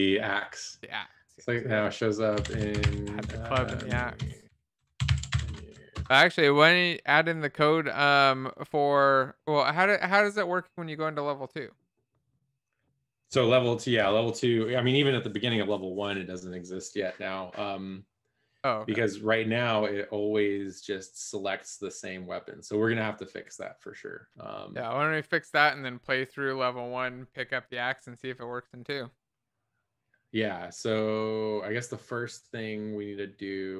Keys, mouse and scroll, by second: 2.5-5.8 typing, 5.9 ctrl+Return, 7.8 ctrl+s.